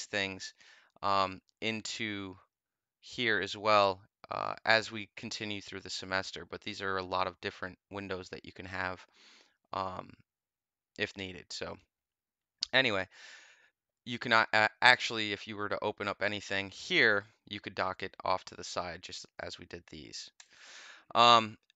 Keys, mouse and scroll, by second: 20.3 click.